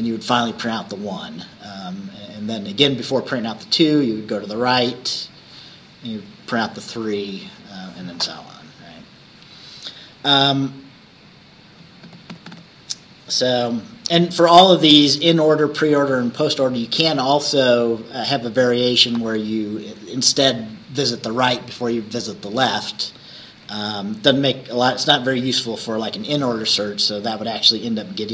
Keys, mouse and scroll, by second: 23.7 Left.